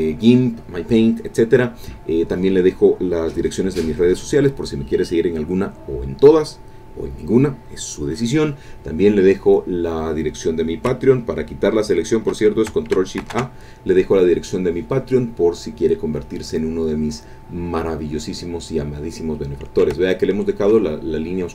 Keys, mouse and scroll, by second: 13.3 ctrl+shift+Caps_Lock, 13.3 ctrl+shift+a, 17.6 click, 20.0 ctrl+click.